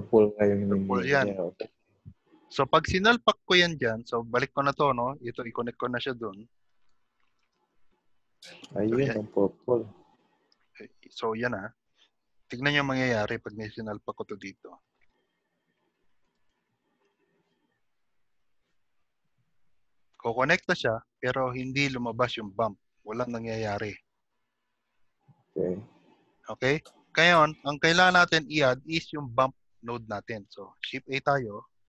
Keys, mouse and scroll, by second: 0.2 click, 1.5-2.5 scroll down 4, 2.7-3.3 scroll down 7, 5.8 middle click, 5.8-6.5 scroll down 5, 6.5 click, 8.9 scroll up 1, 9.8 middle click, 9.8-10.6 scroll up 2, 12.8 scroll up 4, 13.4 middle click, 13.4 scroll up 3, 14.7 click, 16.4 click, 17.4 click, 21.2 middle click, 27.9 scroll down 1, 28.5 middle click, 28.5-29.1 scroll down 2, 29.5 click, 30.8 shift+a.